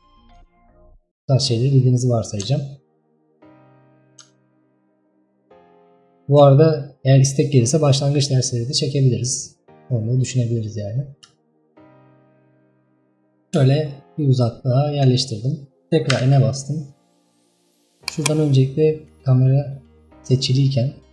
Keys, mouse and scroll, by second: 5.2-5.7 scroll up 1, 5.7-6.1 scroll down 1, 11.5-12.9 shift+middle drag, 12.9-13.3 scroll up 1, 13.3-13.9 scroll down 1, 13.9-16.2 shift+middle drag, 16.2 n, 18.1-21.1 drag.